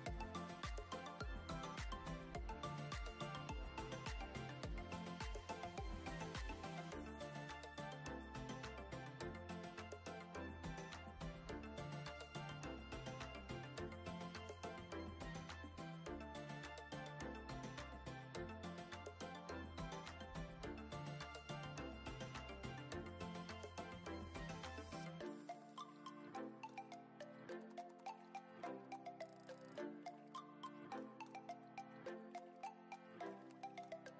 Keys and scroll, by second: 4.5 ctrl+c, 6.8 ctrl+z, 12.5 ctrl+-.